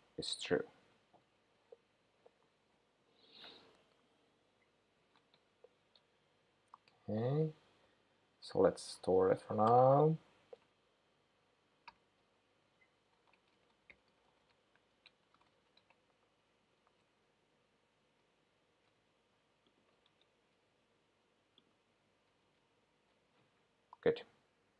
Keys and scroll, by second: 6.7 shift+super+9.